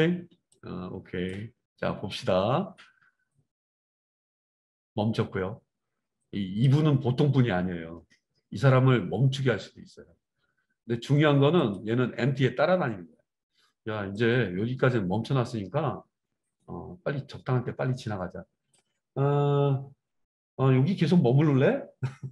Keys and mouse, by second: 11.7-14.1 middle drag, 14.1-22.3 drag.